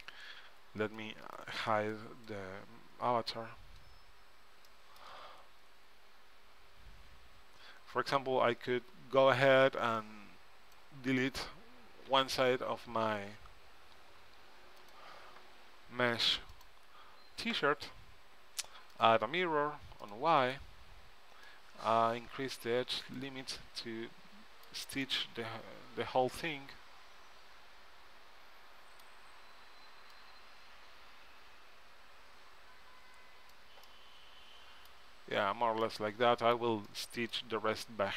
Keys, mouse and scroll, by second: 1.1-3.8 drag, 3.2-6.7 middle drag, 9.5 b, 12.3 z, 13.5 x, 16.7-18.4 drag, 20.2-23.4 drag, 23.7-25.8 middle drag, 25.9 middle click, 30.3-32.2 drag, 34.0 middle click.